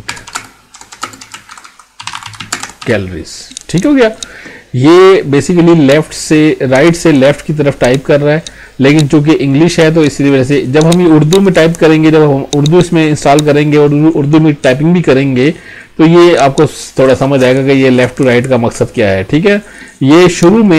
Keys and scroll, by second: 0.4 space, 1.1 space, 2.5 space.